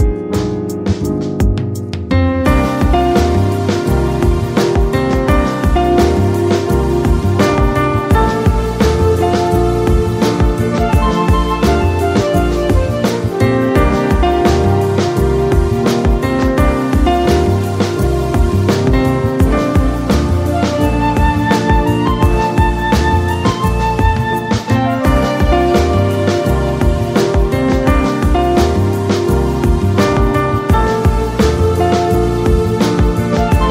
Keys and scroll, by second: 2.7 space, 5.3 space, 7.0 space, 11.1 space, 17.6 space, 18.6 space, 23.5 ctrl+z, 24.3 ctrl+z, 30.0 space, 31.9 space.